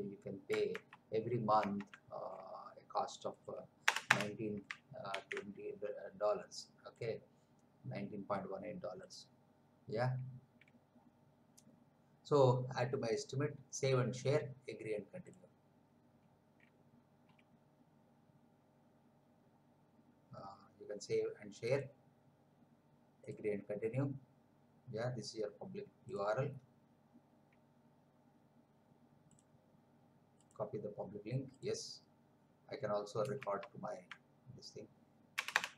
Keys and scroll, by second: 0.9 alt+Tab, 3.9 Return, 5.1 ctrl+v, 33.6 alt+Tab, 35.3 Return.